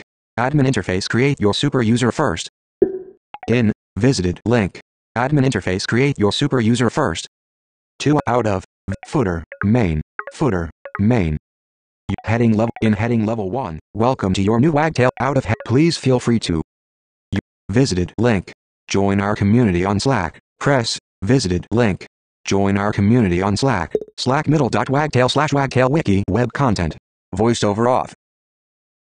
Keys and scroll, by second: 27.1 super+F5.